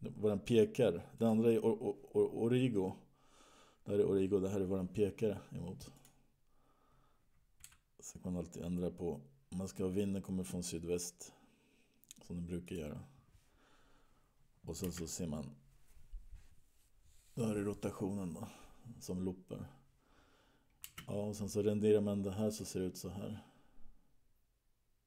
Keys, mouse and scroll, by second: 6.5 click, 8.2 g, 15.0 space, 21.4 space, 22.8 click.